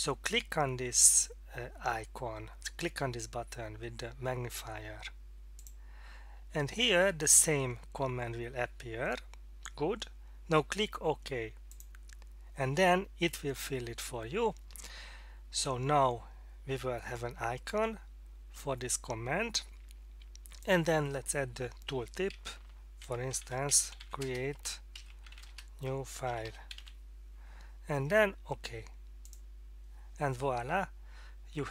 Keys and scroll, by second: 23.0-26.7 typing, 28.1 typing.